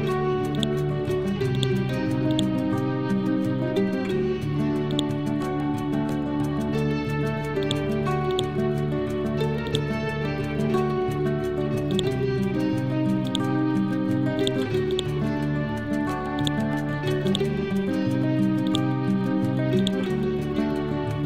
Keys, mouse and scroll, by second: 0.6 shift+click, 1.2 e, 1.6 click, 2.8 Left, 5.0 click, 6.6 Right, 7.7-11.9 drag, 14.4 click, 17.9 scroll up 1, 18.7-21.2 ctrl+drag.